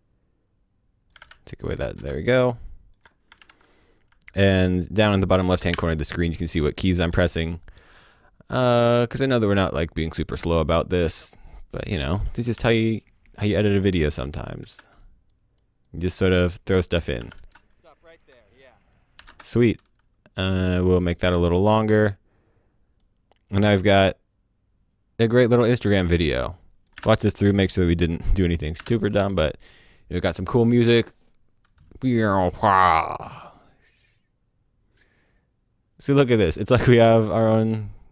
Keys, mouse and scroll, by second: 1.1 q, 1.2 space, 2.1 click, 2.5 alt+click, 3.4 scroll down 1, 4.5 alt+click, 5.7-6.1 alt+scroll up 2, 6.7 click, 7.1 v, 7.2 click, 12.6 space, 14.6 space, 15.3 click, 17.3 space, 19.2 o, 19.2 space, 19.5 click, 26.9 space, 27.6 click, 28.8 space.